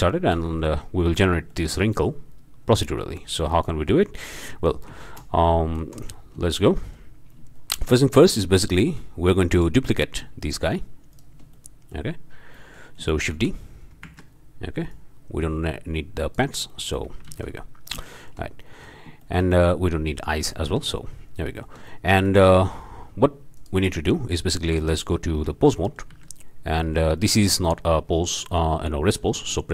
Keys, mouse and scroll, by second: 0.7 click, 1.2 click, 3.9 shift+click, 4.2-4.8 shift+drag, 4.9 shift+z, 5.8 z, 6.5 shift+click, 6.8-7.2 shift+right drag, 7.6 shift+right click, 8.4 scroll down 2, 8.7 shift+right click, 8.9 shift+drag, 9.5 drag, 11.1 shift+drag, 11.5-12.1 shift+drag, 12.5-12.9 drag, 13.3 shift+d, 14.1 Escape, 14.9-16.5 drag, 16.7-17.1 shift+drag, 17.4 alt+shift+a, 18.1-18.5 shift+drag, 19.2-19.9 shift+drag, 20.5-20.9 shift+drag, 21.5-21.8 shift+drag, 22.0-22.6 shift+drag, 23.5 drag, 24.3-24.7 drag, 24.9 Tab, 25.8 click, 26.1 a, 26.8-27.1 drag, 29.1 click.